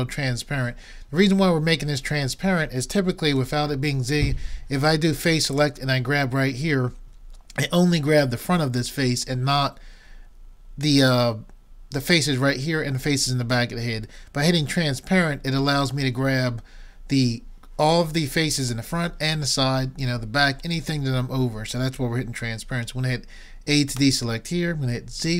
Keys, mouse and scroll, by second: 3.4 z, 5.5-7.3 drag, 24.0 a, 25.2 z.